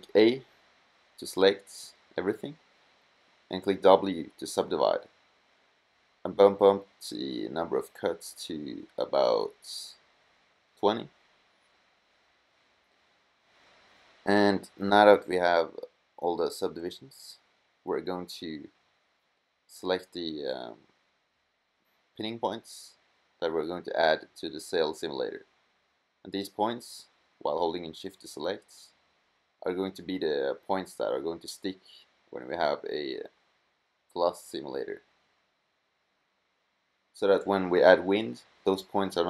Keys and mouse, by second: 1.1 a, 1.6 w, 5.2-6.8 drag, 8.4-9.9 drag, 9.9 right click, 13.8 middle click, 15.2-18.9 middle drag, 18.9 a, 19.4-20.8 drag, 20.9 click, 28.8 middle click, 34.1 c.